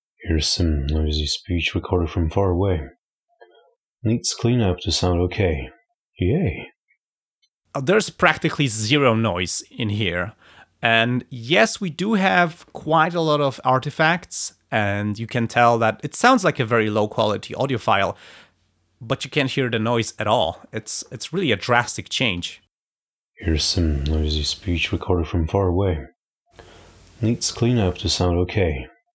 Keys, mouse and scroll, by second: 21.7 click, 22.2 space, 23.3 click, 24.8 click, 26.4 click, 28.1 click.